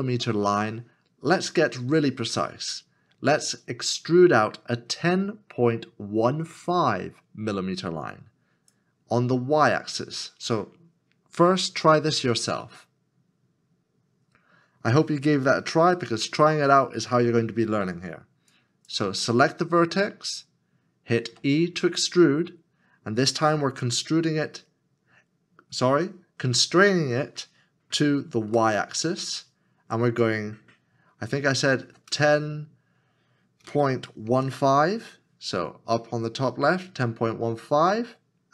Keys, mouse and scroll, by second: 21.4 e, 28.5 y, 31.8 KP_1, 32.1 KP_0, 34.5 KP_5.